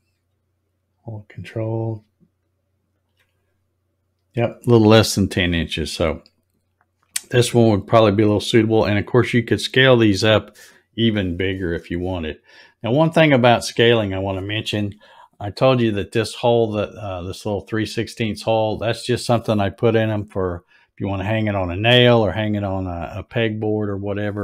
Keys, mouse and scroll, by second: 2.9 ctrl+click, 5.9 click, 6.5-7.2 scroll up 7, 7.4 middle click, 12.2 scroll up 1, 13.9-14.4 scroll up 1, 15.2 scroll down 1.